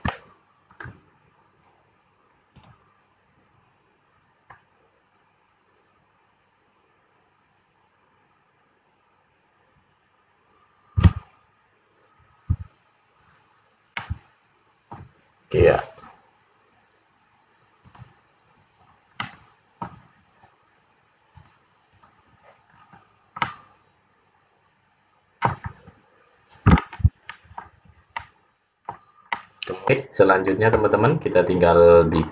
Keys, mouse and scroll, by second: 2.6 click, 4.3-4.7 scroll up 2, 13.9 middle click, 17.8 click, 18.8-19.2 scroll down 3, 19.2 middle click, 21.4 click, 22.8-23.3 scroll up 5, 23.5 middle click, 25.7-26.4 scroll down 3, 28.1 middle click, 31.1-31.9 scroll up 4, 31.9-32.3 scroll down 3.